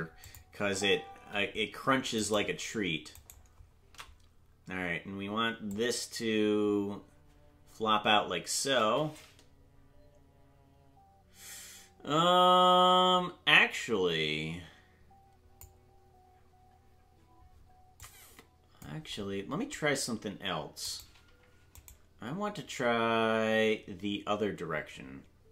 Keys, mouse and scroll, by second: 0.2 click, 0.2 space, 0.6 space, 2.5 right click, 3.5 shift+right click, 5.7-15.6 drag, 18.0 click, 21.2-25.5 right drag.